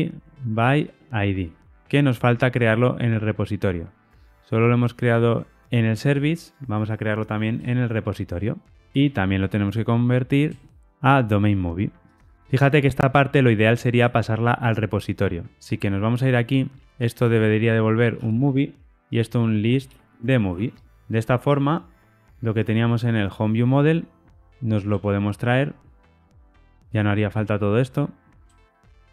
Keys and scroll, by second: 3.3 super+b, 5.6 super+[, 10.8 Tab, 16.2 super+b, 18.7 Escape, 20.8 Escape, 24.4 super+x, 25.5 super+[, 25.5 ctrl+alt+Left.